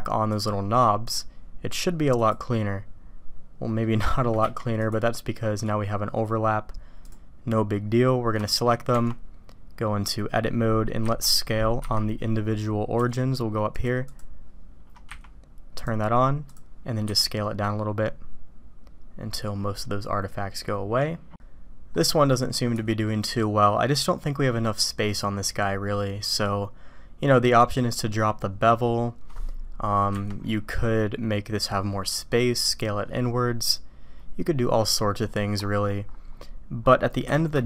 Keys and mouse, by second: 0.4 click, 2.5-3.8 drag, 4.0 shift+click, 8.4 shift+click, 11.0 a, 11.7 ., 13.7 click, 14.0-14.5 drag, 15.8-16.5 drag, 17.0 s, 21.9 click, 34.9-37.6 middle drag.